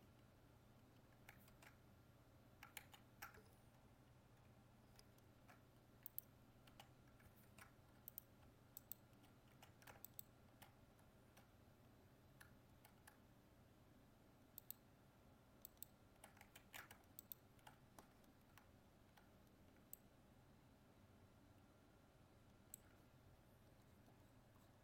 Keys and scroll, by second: 2.8 ctrl+z, 5.0 ctrl+f, 7.4 ctrl+Tab, 16.6 ctrl+z.